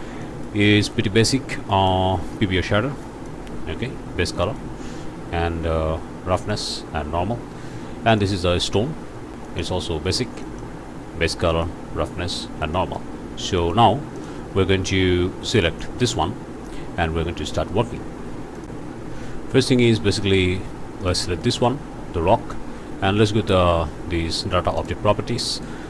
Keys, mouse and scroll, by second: 0.2 middle click, 0.4 scroll up 2, 1.7 click, 3.0 click, 4.4 click, 6.3 click, 8.1 click, 8.9 scroll down 1, 9.4 click, 9.7 scroll up 1, 10.4 click, 11.5 click, 12.7 click, 13.1 scroll down 1, 13.6 click, 14.1 click, 15.5 click, 18.6 click, 19.9 click, 20.4 alt+a, 21.0 alt+click, 21.4 click, 24.8 click.